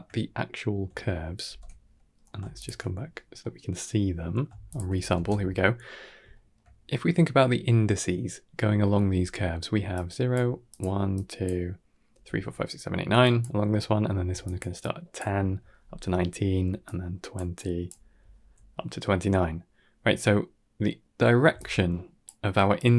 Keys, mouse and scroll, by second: 0.1 scroll down 1, 0.2 middle click, 1.3 ctrl+space, 1.8 middle click, 2.4 alt+shift+click, 3.3 middle click, 3.8 middle click, 4.5 alt+shift+click, 5.0 ctrl+space, 6.2 shift+middle click, 9.6-15.5 typing, 9.8 click, 10.6 click, 11.0 click, 13.1 click, 14.3 click, 14.7 click, 16.5-18.1 typing, 16.7 click, 17.4 click, 21.4-22.9 typing, 21.5 click, 22.6 click.